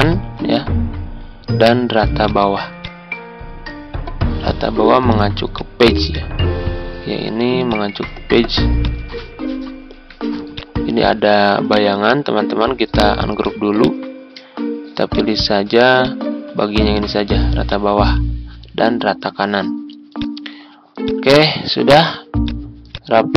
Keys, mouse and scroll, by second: 0.3 ctrl+g, 2.2 click, 9.1-9.5 ctrl+scroll up 1, 10.5 click, 11.7 right click, 13.4 click, 14.1 ctrl+scroll down 1, 15.0 click, 16.5 ctrl+z, 17.6 click, 21.4 ctrl+scroll down 1, 22.3 click.